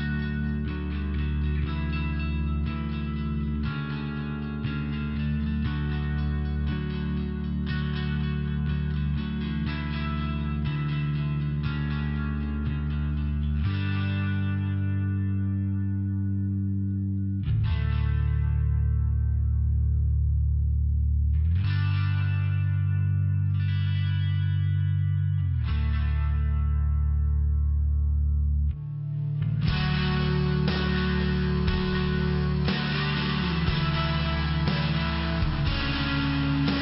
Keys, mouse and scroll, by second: 1.1 click, 3.5 click, 7.7 click, 8.0 click, 9.3 click, 13.2 click, 13.6 click, 13.9 click, 14.2 click, 14.6 click, 15.7 click, 18.0 click, 19.7 click, 20.0 click, 20.3 click, 22.9 click, 24.8 click, 28.2 click, 28.4 click, 31.2 click, 34.4 click, 35.8 click.